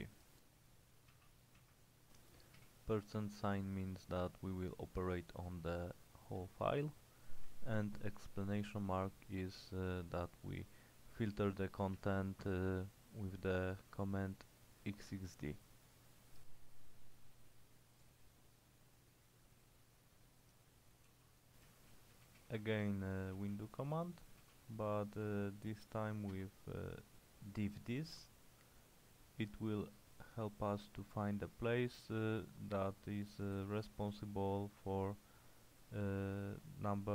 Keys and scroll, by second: 1.2-2.6 typing, 7.5 Return, 12.0 Return, 20.9-26.9 typing, 33.6 ctrl+w, 33.9 h.